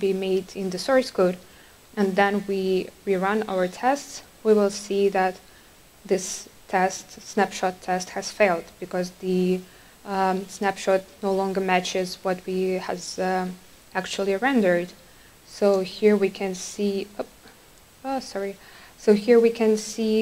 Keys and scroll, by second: 3.2 ctrl+r.